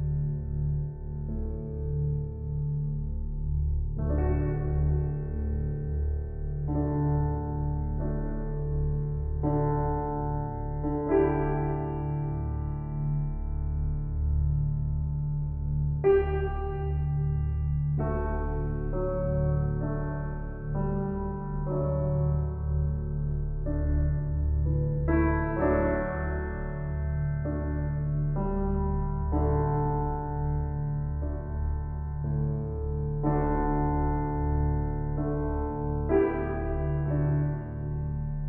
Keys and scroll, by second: 25.2 [.